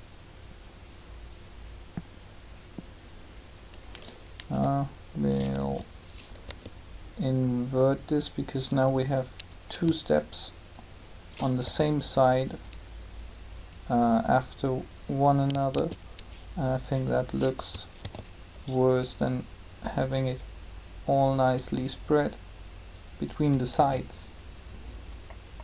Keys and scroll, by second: 6.4 g, 11.6 shift+g, 15.7 shift+d, 17.9 alt+a, 23.7 alt+a.